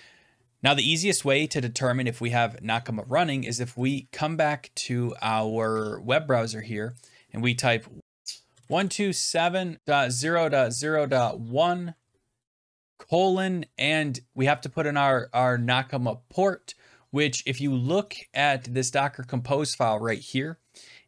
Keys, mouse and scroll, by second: 3.8 click, 6.9 click, 8.0-11.5 typing, 8.8 click, 12.5-13.3 typing.